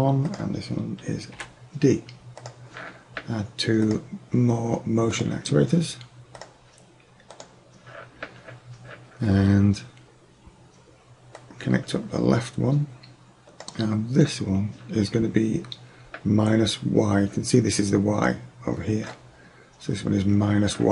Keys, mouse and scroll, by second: 2.2 click, 6.4-8.3 drag, 11.4-13.4 drag.